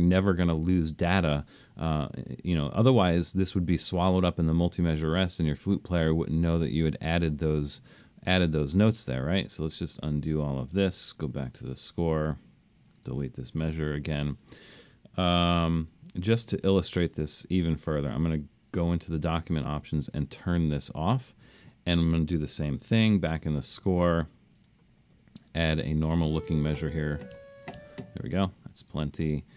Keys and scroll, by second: 9.7 super+z, 10.1 super+z, 13.9 9, 16.2 alt+super+., 19.1 alt+super+a, 23.1 alt+super+/, 26.5-27.8 typing, 29.2 Escape.